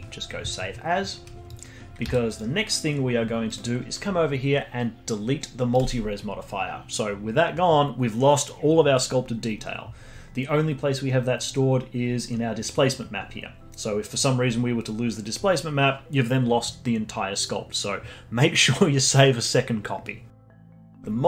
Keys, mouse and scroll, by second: 1.5 click, 2.0 z, 3.4 click, 5.7 click, 10.4-11.4 scroll down 1, 12.0-12.5 scroll up 5, 12.5-13.2 scroll down 8, 13.2-13.8 scroll up 3, 13.8 scroll down 1.